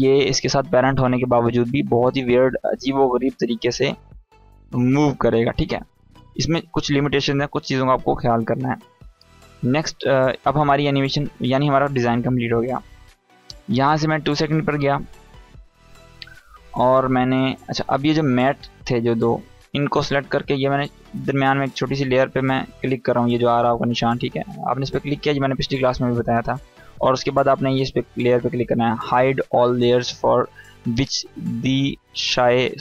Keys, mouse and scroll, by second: 9.8-13.9 drag, 15.7 ctrl+Right, 18.2 click, 19.6 ctrl+click, 24.2 click.